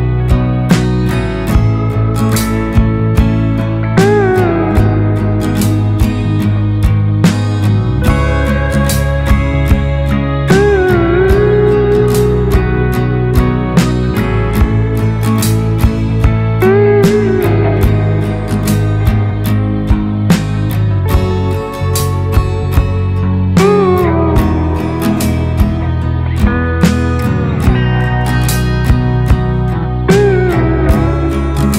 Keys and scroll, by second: 3.0 ctrl+r, 5.2 ctrl+space, 10.5 ctrl+space, 12.0 Delete, 12.4 space, 14.9 ctrl+space, 19.1 ctrl+space, 20.8 ctrl+space, 21.9 ctrl+space, 30.6 Right, 30.9 Right, 31.1 Right, 31.4 Right.